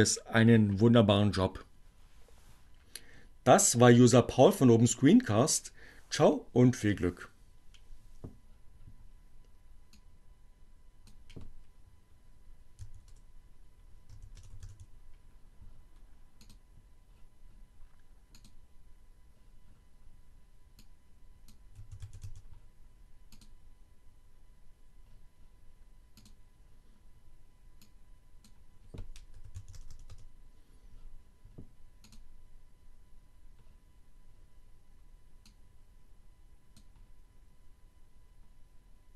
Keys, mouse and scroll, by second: 9.6 click, 10.9 w, 13.3 h, 13.6 e, 16.4 click, 18.3 click, 20.9 click, 21.5-22.6 typing, 23.4 click, 26.2 click, 27.6 click, 28.8 h, 29.6 e, 30.1 o, 32.1 click, 35.3 click.